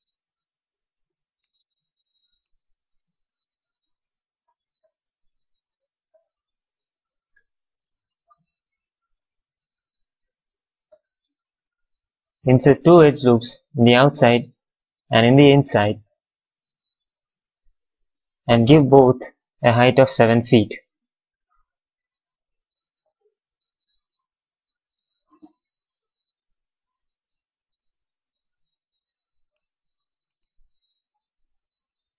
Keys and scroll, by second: 1.3 space, 2.8 q, 4.2 q, 7.7 q, 16.5 w, 19.5 space, 21.1 f, 21.7 space, 24.7 x, 29.4 space.